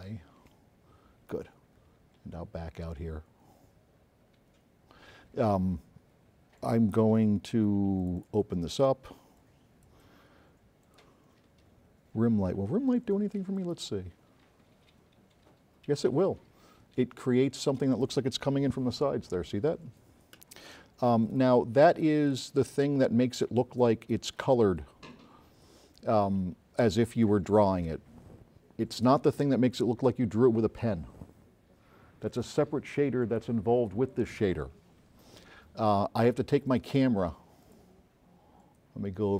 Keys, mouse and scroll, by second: 2.1 middle click, 2.5 middle click, 2.6 middle click, 2.9 middle click, 3.3 middle click, 8.1 click, 9.4-10.1 drag, 10.9 click, 13.7 click, 21.4 right click, 21.4 s, 23.0 middle click, 23.5 click, 36.7 click, 37.7 click.